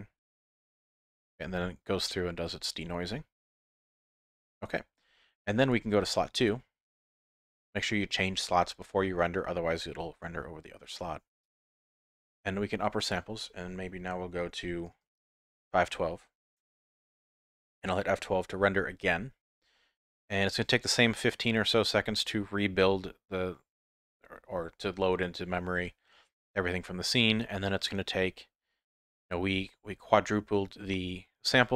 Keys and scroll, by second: 18.9 F12.